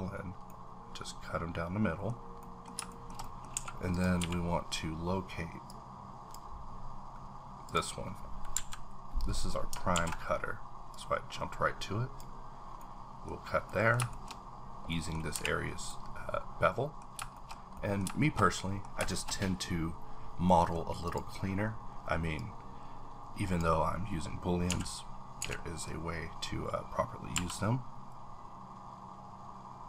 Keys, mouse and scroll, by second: 0.5-2.2 middle drag, 2.1 scroll down 3, 2.4 middle click, 2.9 shift+middle click, 3.5 a, 3.9 click, 4.2 q, 5.7-7.1 drag, 6.6-7.1 scroll down 1, 7.1-7.7 scroll up 1, 7.7 click, 9.3-9.9 scroll up 3, 9.9 alt+w, 10.9-13.3 drag, 12.8 middle click, 13.3 scroll down 1, 13.6 middle click, 14.1 shift+middle click, 14.9 shift+middle click, 15.3 h, 15.6 scroll down 1, 15.9 middle click, 17.3 shift+middle click, 18.5 shift+middle click, 19.3-20.5 scroll up 1, 21.0 click, 21.4-22.3 scroll up 3, 22.3-27.3 drag, 24.7 x, 25.4 z, 27.3 b.